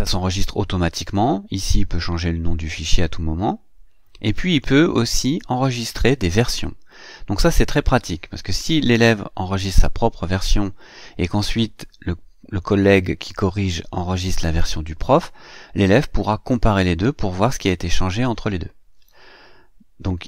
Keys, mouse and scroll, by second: 1.4 click, 4.3 click.